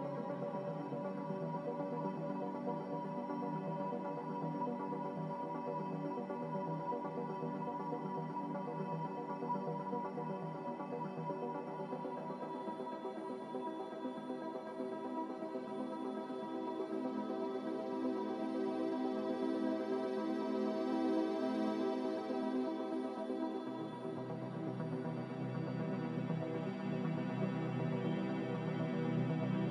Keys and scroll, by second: 8.8 n, 14.3 z, 23.0 typing, 23.4 Return, 26.7 typing.